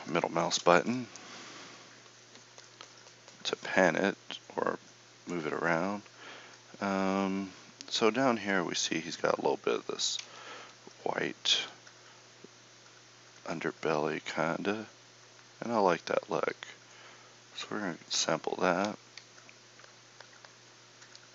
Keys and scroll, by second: 18.8 KP_1.